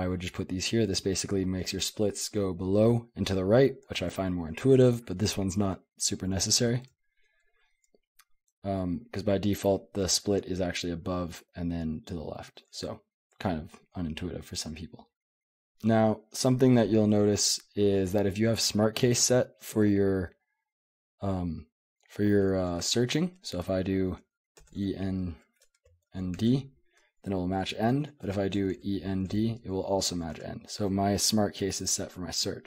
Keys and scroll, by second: 0.0-9.2 typing, 13.3 j, 13.7 j, 15.0 k, 16.5 k, 16.7 k, 16.9 k, 19.1-19.5 h, 22.7 /, 24.6-26.9 typing, 28.0-29.3 typing, 30.4 Escape.